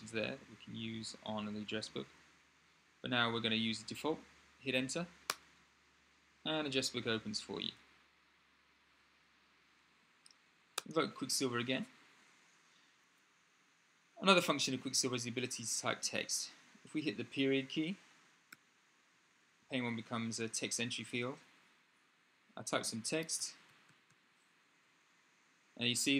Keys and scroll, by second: 2.8 Up, 18.3 ., 22.6-24.3 typing.